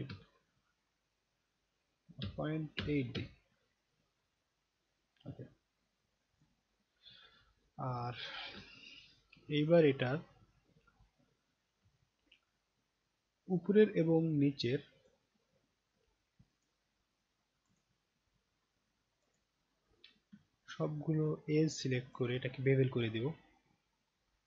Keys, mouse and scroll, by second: 6.4 click, 8.6 alt+middle click, 9.3 alt+right click, 10.3 alt+middle click, 11.0 alt+right click, 11.9-13.6 right drag, 15.0 click, 16.4 shift+click, 17.6 shift+click, 19.2 shift+click, 19.3 shift+click, 20.4-22.1 alt+drag, 23.0 click.